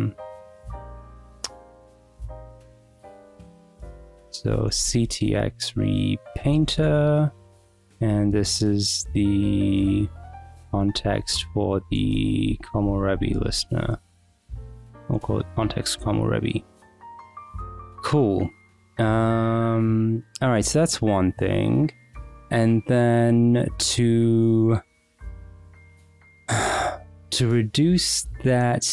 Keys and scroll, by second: 0.8 k, 1.6 k, 3.5-7.6 typing, 6.9 Return, 7.4 Escape, 10.9-15.0 typing, 15.5 Return, 16.8 Escape, 17.0-17.9 typing, 22.4 Return.